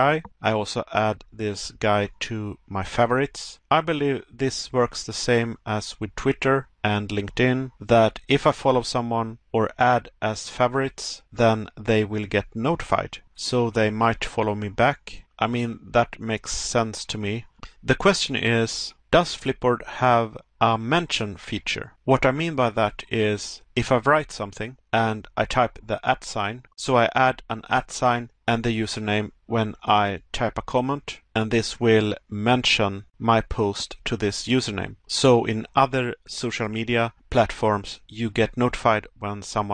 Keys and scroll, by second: 0.8 Pause, 3.6 Pause, 6.2 Pause, 9.0 Pause, 10.6 Pause, 12.7 Pause, 14.7 Pause, 16.6 Pause, 18.1 Pause, 19.5 Pause.